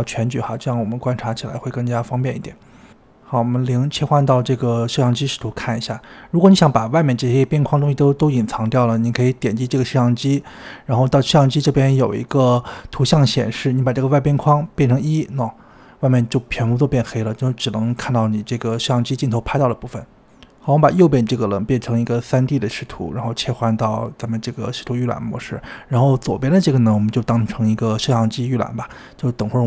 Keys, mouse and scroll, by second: 1.0-1.3 middle drag, 1.3 KP_1, 1.5 KP_0, 1.7 scroll up 1, 2.0-2.4 drag, 2.4 g, 2.6 g, 2.8 click, 3.8 KP_0, 4.4 KP_0, 7.4 scroll up 2, 8.5-9.5 drag, 10.7-11.1 scroll down 4, 11.5-12.2 scroll down 4, 12.4-13.8 scroll down 2, 13.8-20.2 drag, 20.2-22.7 middle drag, 21.3-22.7 scroll down 7, 22.7-23.7 drag, 23.7-25.2 shift+middle drag, 25.0 click.